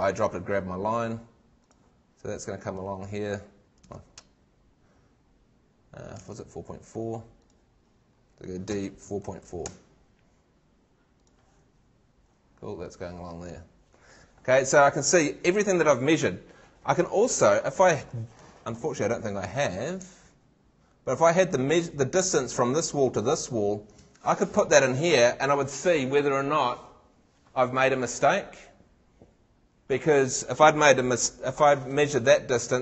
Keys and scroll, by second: 3.8 super+Tab, 6.3 super+Tab, 8.7 d, 17.7 super+Tab, 24.1 super+Tab.